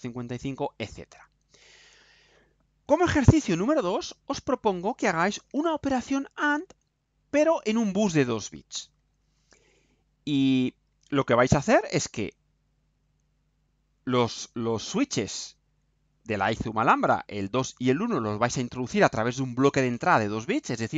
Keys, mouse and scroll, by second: 1.4 scroll down 1.